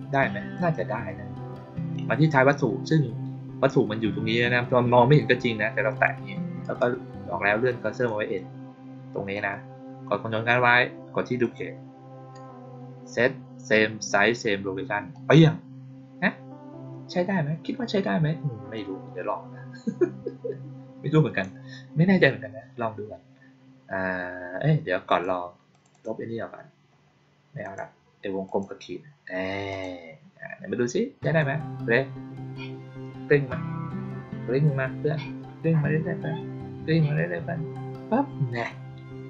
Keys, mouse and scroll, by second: 0.5 click, 5.8 click, 6.5 right click, 7.8 click, 9.2 click, 11.3 ctrl+click, 15.0 click, 18.6-21.3 drag, 25.0 click, 25.6 click, 25.8 click, 27.5 click, 28.4 click, 29.6 click, 31.1 click.